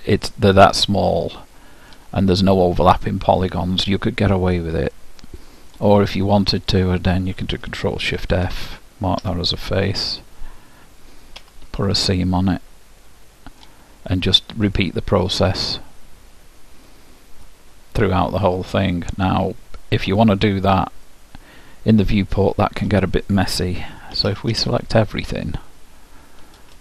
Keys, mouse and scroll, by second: 0.7-2.5 middle drag, 5.1-6.9 middle drag, 6.9-8.7 drag, 9.4 ctrl+alt+shift+f, 12.3-14.3 middle drag, 20.7-23.0 middle drag, 24.3 a, 24.6 a.